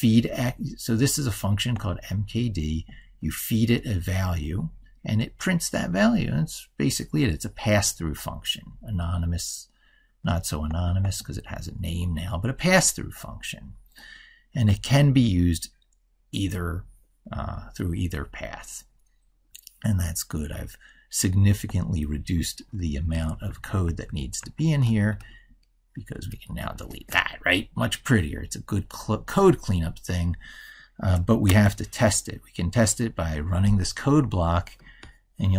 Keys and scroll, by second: 22.7 ctrl+Left, 27.0 ctrl+s.